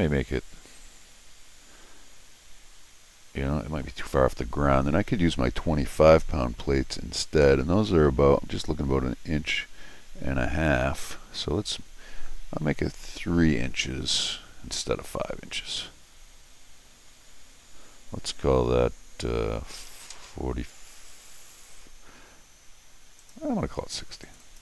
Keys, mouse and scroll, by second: 23.2 click, 24.2 click, 24.4 click.